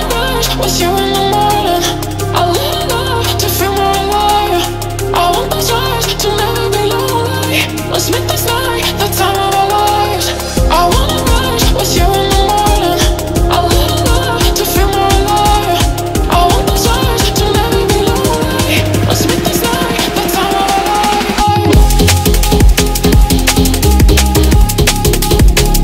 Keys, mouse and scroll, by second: 0.3 click, 0.8 shift+a, 5.4 typing, 6.2-7.3 drag, 8.5-9.7 drag, 10.4-11.3 drag, 12.9 scroll up 1, 13.6 shift+middle click, 14.9-16.7 drag, 17.1-17.6 drag, 18.2-18.6 drag, 19.1 click, 20.1 click, 20.7-22.0 drag, 23.4 click, 24.0-24.7 drag, 24.9 click.